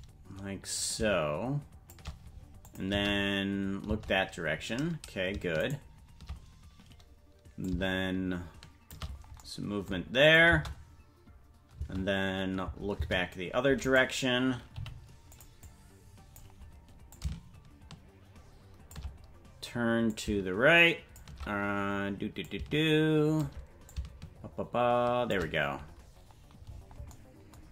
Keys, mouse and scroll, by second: 0.7-2.0 drag, 2.6 click, 2.9 space, 5.7 shift+right click, 7.6-9.0 shift+drag, 10.3 click, 10.5 space, 13.8 right click, 13.8 space, 14.7 g, 15.6 click, 17.1-19.0 drag, 20.1-21.2 drag, 22.4-23.5 drag, 23.8-25.4 drag.